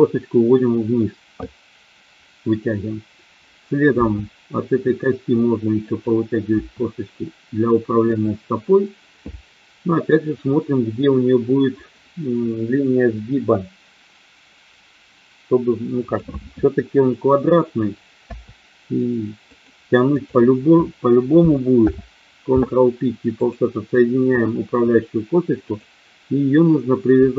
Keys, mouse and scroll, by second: 3.9 e, 5.8 click, 6.6 e, 8.1 click, 16.1 click, 18.3 e, 19.4 click, 21.8 alt+p, 25.7 click.